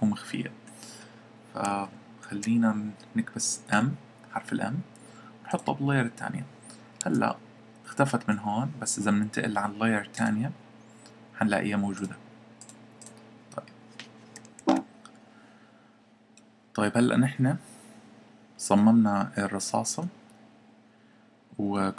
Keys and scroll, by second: 3.7 m, 7.0 Escape.